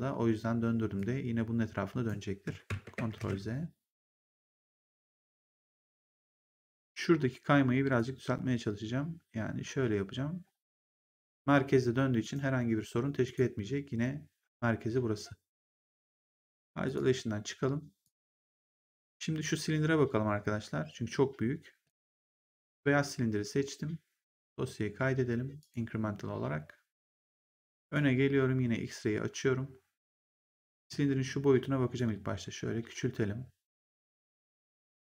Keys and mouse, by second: 0.9 click, 3.1 ctrl+z, 4.7 right click, 5.2 click, 7.9 click, 12.1 right click, 16.8 click, 17.9 click, 21.8 click, 25.5 click, 27.2 right click, 27.8 click, 30.0 click, 30.8 r, 31.9 click.